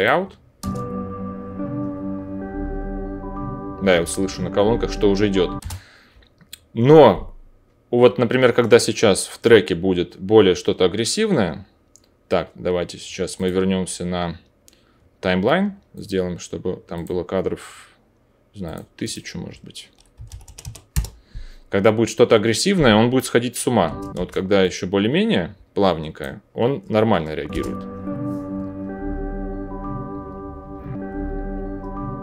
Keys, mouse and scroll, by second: 0.0 middle click, 0.5-13.3 drag, 0.5 space, 5.5 space, 20.4 KP_0, 23.8 space, 24.1 space, 27.5 space.